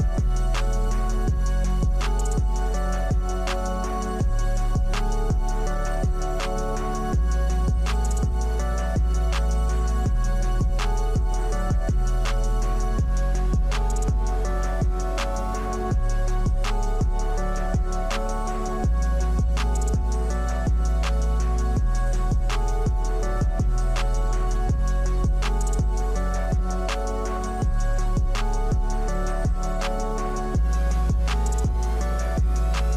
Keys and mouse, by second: 5.4 click, 6.9 KP_0, 8.9 click, 9.3 click, 10.3 KP_1, 11.1-11.5 shift+middle drag, 13.4 s, 17.9 click, 18.2 click, 18.4 Tab, 18.6 middle click, 19.6 shift+middle click, 20.3 Tab, 20.8 KP_1, 21.2 Tab, 21.7 shift+z, 22.4 click, 22.8 shift+middle click, 23.4 click, 24.7 x, 25.5 middle click, 26.6 middle click, 27.5 shift+z, 28.3 middle click, 29.1 Tab, 29.3 click, 29.8 click, 30.0 Tab, 30.1 click, 30.4 Tab, 30.6 middle click, 31.5 shift+middle click, 32.7 click.